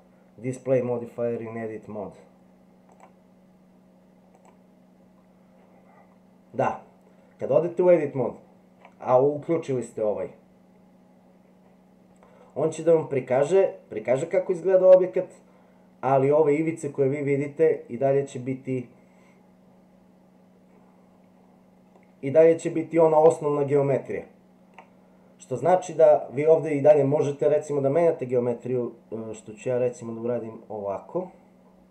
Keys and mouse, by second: 3.0 click, 4.4 click, 22.0-24.7 middle drag.